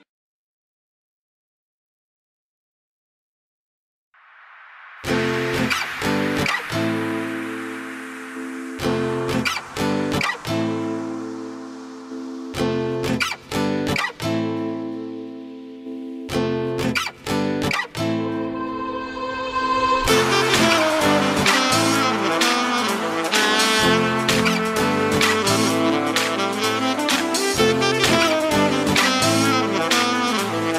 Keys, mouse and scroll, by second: 4.2-7.8 middle drag, 9.7-10.3 scroll down 2, 10.3-22.2 middle drag, 22.2 KP_1, 23.4-24.3 scroll up 1, 24.3 click, 25.2 s, 26.4 click, 27.2-28.6 middle drag, 28.6 ctrl+z, 29.2 ctrl+z, 30.0 click, 30.6-30.7 middle drag.